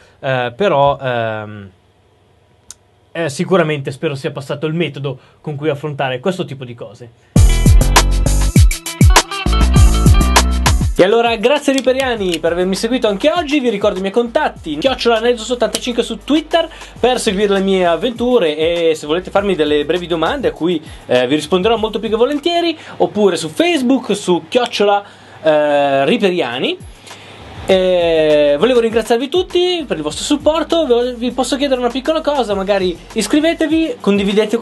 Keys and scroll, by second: 28.7 typing.